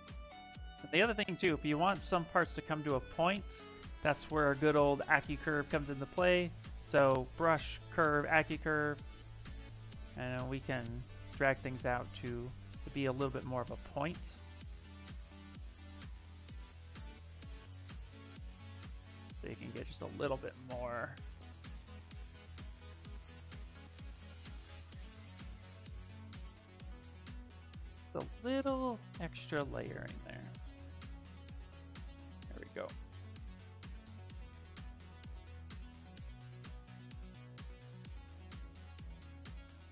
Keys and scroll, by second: 2.4 s, 20.8 s, 22.0 s.